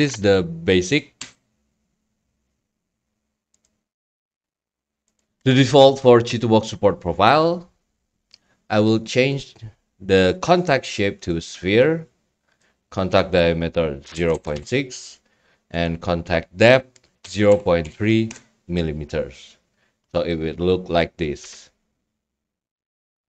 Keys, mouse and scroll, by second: 0.0 scroll, 0.2 click, 1.2 a, 3.6-4.7 drag, 5.2 click, 9.3 click, 10.0 click, 11.6 click, 12.5 click, 15.9 click.